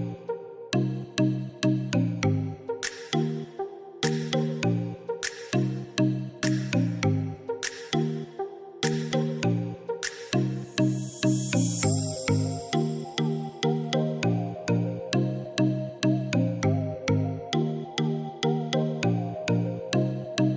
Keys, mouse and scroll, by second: 1.3-2.4 typing, 2.5 Tab, 4.2 e, 7.5 click, 13.2 click, 17.5 click.